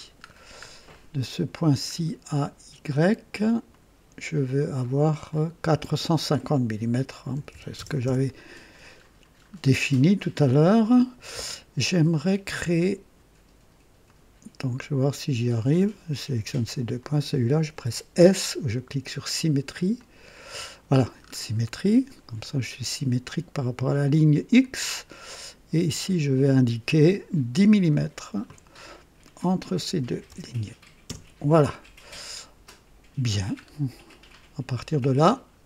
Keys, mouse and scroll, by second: 0.3-0.6 scroll down 1, 0.9 right click, 1.9 scroll down 1, 3.7 click, 5.3 click, 7.3-8.3 typing, 8.0 KP_Enter, 9.5 scroll up 1, 9.9 right click, 14.0 click, 15.4 click, 17.0 click, 19.9 click, 21.2-21.5 scroll up 2, 24.5 click, 26.0 click, 27.9 click, 30.0 KP_1, 30.3 KP_0, 31.0 KP_Enter, 33.6 scroll down 1, 34.1-35.1 right drag, 35.3 scroll down 1.